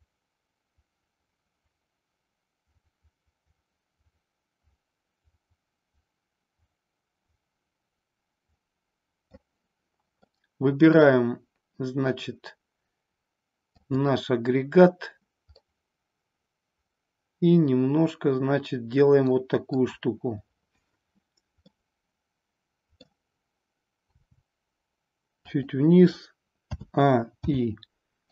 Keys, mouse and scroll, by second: 10.3-11.1 middle drag, 13.8 click, 15.6-19.7 middle drag, 21.6-23.0 middle drag, 24.1 r, 25.5 click, 26.6 a, 27.4 i.